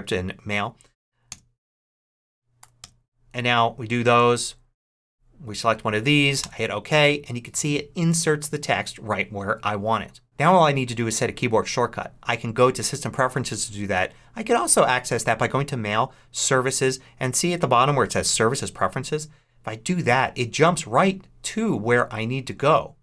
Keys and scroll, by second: 1.2 Return, 2.5 3, 2.7 Return, 4.3 Down, 6.3 Return.